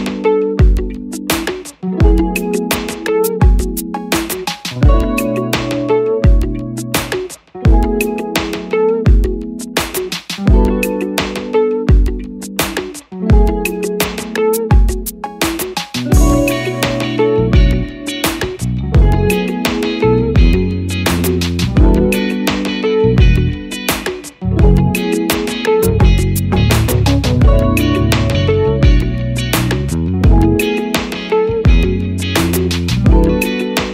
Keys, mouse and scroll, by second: 1.7 double click, 31.7 click.